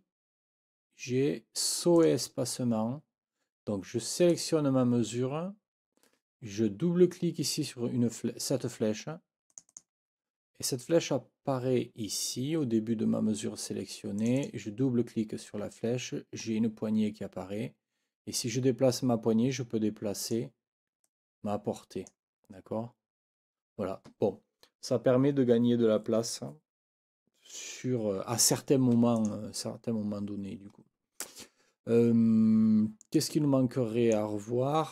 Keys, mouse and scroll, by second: 2.0 click, 4.3 click, 9.5 click, 21.2-22.2 drag, 29.2 click, 33.1 click, 33.2-34.3 scroll up 2, 33.3 click.